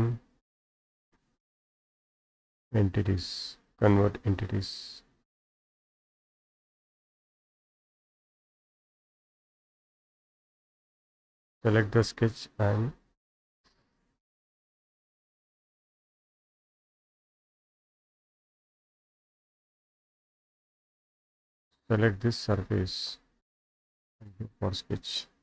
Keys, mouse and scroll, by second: 1.5 click, 4.7-6.2 drag, 7.3 click, 8.5 click, 9.3 Escape, 9.7 click, 13.2-14.2 scroll up 8, 15.1 Escape, 15.5 Escape, 15.5 Escape, 16.1 click, 17.3 Escape, 17.8 Escape, 18.8 click, 19.7 Delete, 20.5-21.6 scroll down 6, 22.6 click, 25.0 right click.